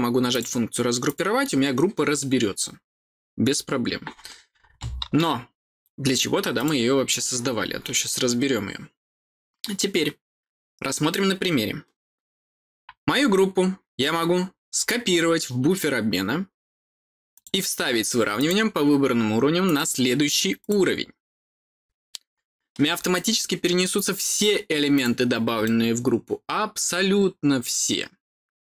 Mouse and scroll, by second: 0.2 click, 1.0 click, 6.5 click, 7.0 click, 14.7 click, 17.3 click, 18.3 click, 19.6 click, 20.5 click, 23.1-24.3 middle drag, 24.9 click, 25.6-28.6 middle drag.